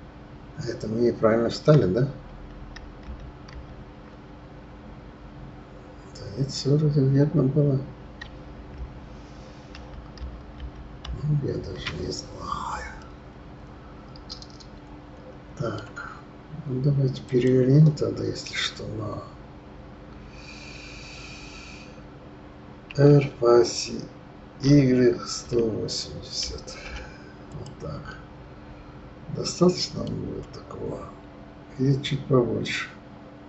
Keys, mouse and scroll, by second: 3.1 ctrl+z, 3.8 ctrl+z, 10.2 ctrl+shift+z, 11.0 ctrl+shift+z, 13.0-16.0 middle drag, 17.2 click, 22.9 r, 28.1-31.1 middle drag.